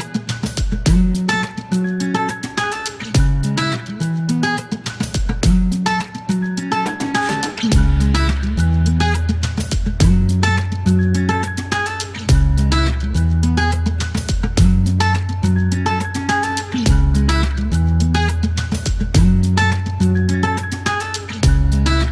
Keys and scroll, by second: 0.2 alt+i, 1.1 KP_Decimal, 1.2 KP_5, 1.2 Return, 1.5 t, 5.1-5.7 typing, 7.0 alt+t, 8.0 alt+i, 8.5 alt+t, 8.9-9.5 typing, 10.7-12.3 typing, 13.0 alt+t, 14.5 alt+t, 14.9 typing, 16.2 Delete, 16.9 e, 17.8 alt+m, 17.9 alt+s.